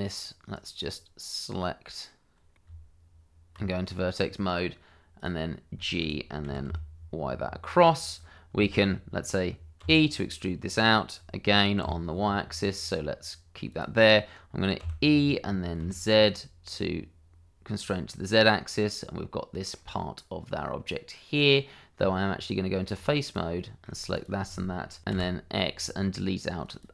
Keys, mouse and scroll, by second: 0.5 click, 2.5 middle click, 2.9 click, 3.4 Tab, 4.4 click, 5.9 shift+middle click, 6.5 g, 6.6 y, 8.1 click, 8.7 shift+middle click, 9.8 e, 13.7 click, 15.8 z, 18.4 click, 18.7 middle click, 21.9 Tab, 23.2 click, 23.6 middle click, 24.1 shift+click, 25.1 x, 26.6 click.